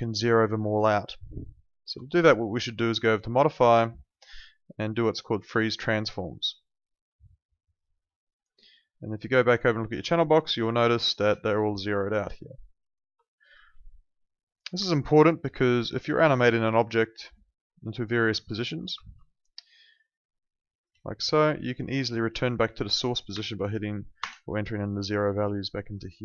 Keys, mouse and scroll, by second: 1.9 Escape, 3.4 click, 7.6 click, 9.8 ctrl+2, 14.7 Escape, 15.6 alt+right click, 15.9 alt+click, 16.1 w, 16.6 alt+click, 16.8 alt+middle click, 17.0 alt+right click, 17.8 click, 19.0 ctrl+z, 20.4 click, 21.0 alt+click, 23.3 0, 24.2 Return, 26.1 alt+middle click.